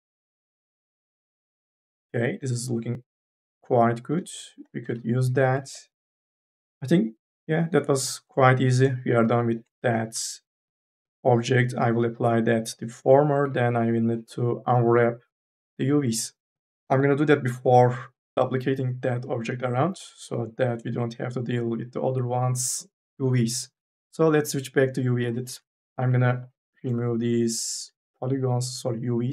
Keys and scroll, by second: 5.0 n, 5.4 a, 6.4 e, 10.9 4, 13.3 3, 25.4 3, 26.2 3, 26.9 ctrl+a.